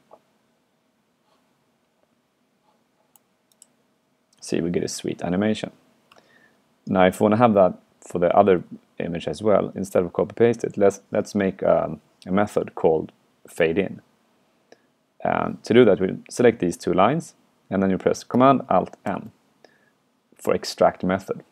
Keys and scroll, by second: 6.2 super+q, 8.6 super+Left, 8.8 super+Left, 19.1 alt+super+m.